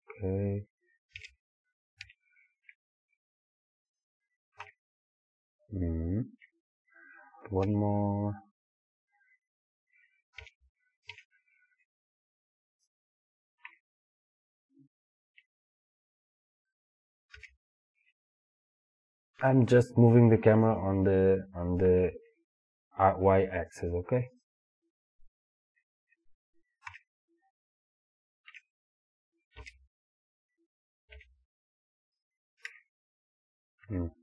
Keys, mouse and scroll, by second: 1.2 g, 4.0 click, 4.6 KP_0, 7.7 y, 10.4 g, 12.9 click, 13.7 KP_0, 17.4 g, 24.5 click, 26.9 KP_0, 29.6 g, 32.3 click, 32.7 KP_0.